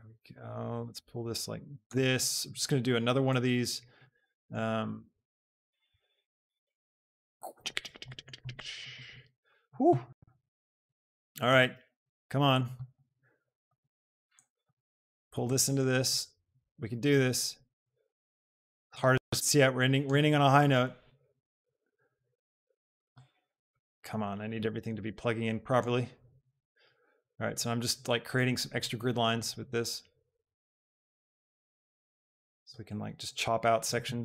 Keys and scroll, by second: 6.8 shift+g, 11.6 shift+d.